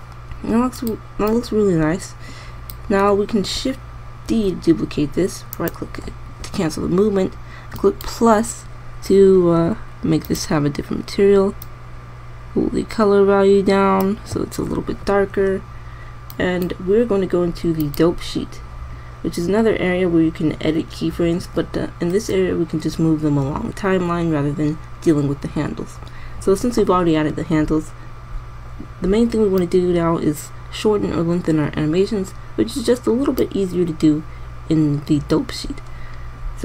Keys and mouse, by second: 4.9 shift+d, 10.3-10.9 middle drag, 12.8-16.4 middle drag, 30.3 click.